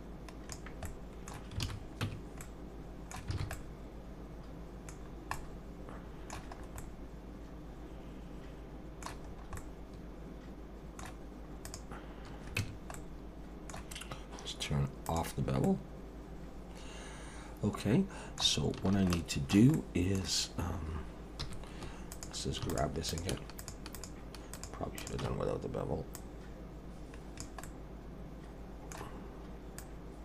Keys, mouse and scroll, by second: 0.8 middle click, 1.6 alt+a, 2.0 Tab, 2.4 middle click, 3.3 alt+a, 3.5 middle click, 5.0 scroll down 3, 5.3 middle click, 6.6 scroll up 2, 6.8 middle click, 9.3-9.6 scroll up 2, 9.6 middle click, 11.6 click, 12.6 Tab, 12.9 middle click, 15.1 click, 15.6 middle click, 19.1 shift+middle click, 21.4 3, 22.1 click, 22.7 shift+click, 23.1 click, 23.6 click, 23.9 shift+click, 25.0 click, 26.1 click, 27.6 middle click, 29.8 click.